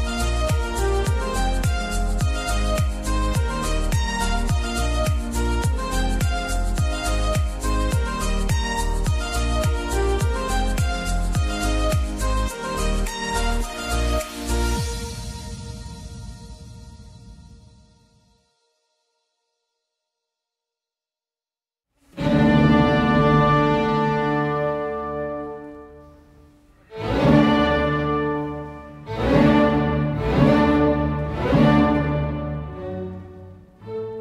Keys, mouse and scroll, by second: 0.0-0.5 typing, 2.0 double click, 6.7 click, 6.9 alt+scroll down 1, 11.8-12.5 alt+scroll, 16.8 ctrl+alt+c, 18.5 4, 19.2 Tab, 20.1 3, 21.7 3, 22.4 6, 26.0 2, 26.1 alt+scroll up 1, 27.6 alt+scroll down 1, 32.1 Return, 33.0-33.7 scroll down 1.